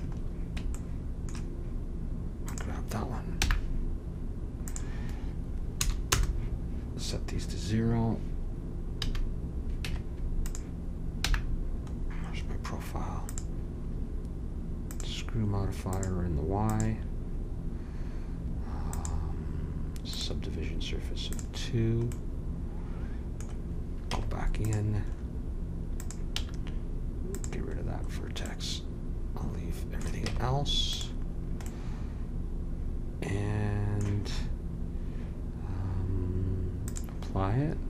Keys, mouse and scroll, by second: 2.4 click, 3.4 n, 4.7 click, 9.0 a, 9.8 Tab, 11.2 n, 13.2-15.1 drag, 15.9-17.8 drag, 18.9-20.8 drag, 21.3-23.0 drag, 23.0 middle click, 24.1 Tab, 26.3 x, 30.2 Tab, 36.8-37.8 drag.